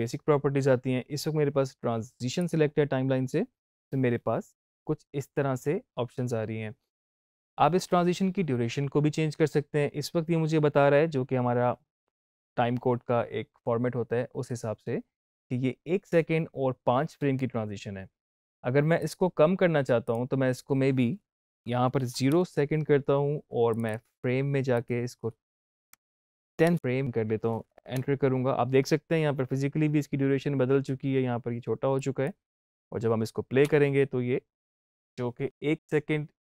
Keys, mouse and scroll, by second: 2.3 click, 18.9 click, 21.9 shift+Right, 23.6 click, 31.8 click, 33.5 space.